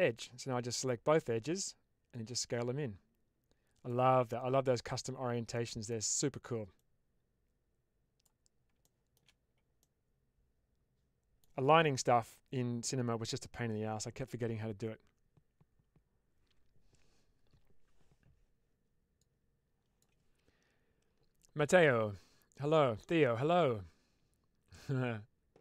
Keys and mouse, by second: 2.1-3.8 drag, 5.5 middle click, 6.6-8.1 drag, 8.7 shift+middle click, 9.7-11.3 middle drag.